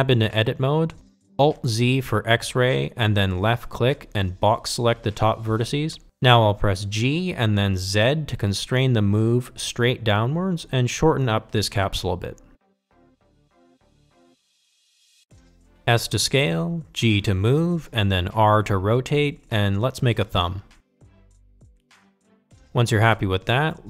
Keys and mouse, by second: 1.2 Tab, 4.5 alt+z, 6.6 click, 10.3 g, 14.1 Tab, 15.3 alt+z, 16.1 shift+middle drag, 18.4 s, 20.3 g, 21.7 r, 23.4 g.